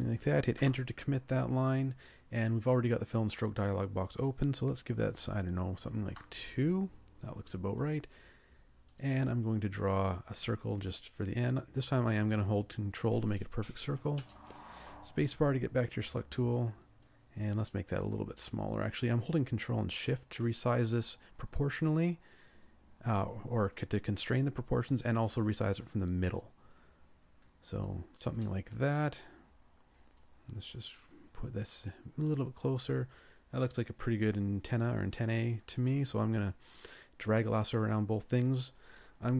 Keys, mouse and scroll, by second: 0.6 Return, 5.1 2, 6.1 Return, 10.8 ctrl+click, 11.4-12.6 ctrl+drag, 14.2 space, 17.9 ctrl+shift+click.